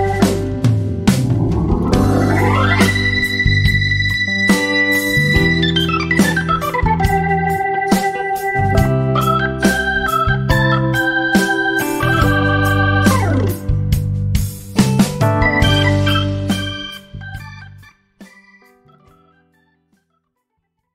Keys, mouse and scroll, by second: 0.0-4.7 typing, 0.5 shift+Tab, 5.7 ctrl+g, 6.0 click, 6.3 ctrl+scroll down 1, 6.6 z, 7.0-7.6 click, 7.5 F1, 7.9 click, 8.3 ctrl+shift+a, 10.0 click, 13.6 F12, 13.9 Escape, 14.3 ctrl+scroll down 1, 14.8 z, 15.5-16.1 click, 16.1 F1, 17.0-18.9 drag, 18.9 F1, 19.5 click.